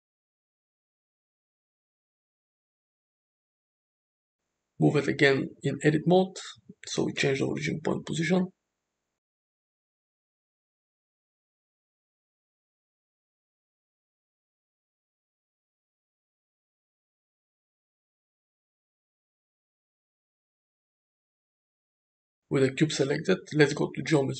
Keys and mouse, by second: 0.8 click, 1.5 Tab, 2.0 Tab, 2.6 Tab, 2.9 click, 3.6 s, 4.7 Tab, 5.3 Tab, 5.6 a, 5.9 g, 8.1 Tab, 9.7 shift+middle drag, 11.7-17.8 right drag, 17.8 s, 19.2 ctrl+a, 23.0 alt+z.